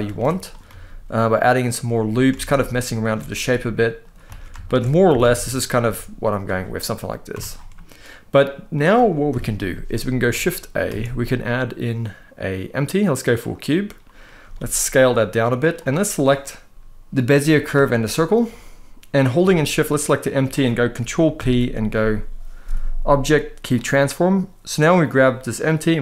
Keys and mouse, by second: 0.1 click, 0.4 s, 1.4 click, 2.1 alt+a, 2.7 alt+shift+click, 3.0 s, 3.7 click, 4.0 alt+a, 4.3 alt+shift+click, 4.8 g, 4.9 g, 5.3 click, 5.5 s, 6.1 click, 6.5 middle click, 7.0 Tab, 7.4-8.4 middle drag, 9.0 KP_1, 10.6 shift+a, 14.1 s, 15.1 click, 16.8 click, 17.5 shift+click, 19.7 shift+click, 21.1 ctrl+p, 24.6 click.